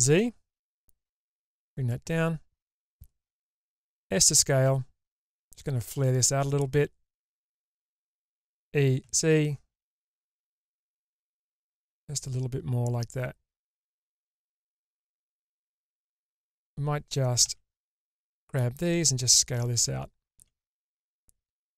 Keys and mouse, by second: 3.6 s, 8.4 e, 17.4 alt+z, 18.2 click, 20.3 s.